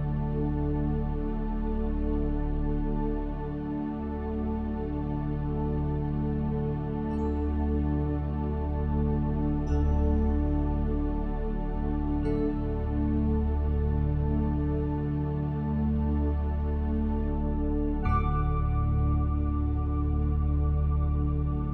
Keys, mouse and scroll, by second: 0.5-2.3 drag, 7.6 a, 8.2 a, 11.7 Tab, 13.0-15.9 drag, 14.9 Tab, 15.9 Tab, 18.3-20.2 drag, 20.2-21.7 middle drag.